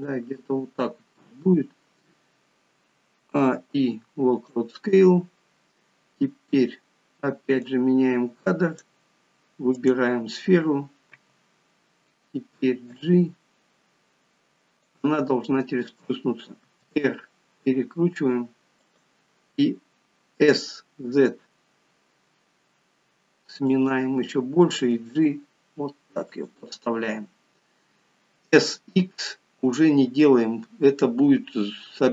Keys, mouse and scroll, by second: 3.2 a, 7.6 click, 9.7 click, 11.1 f.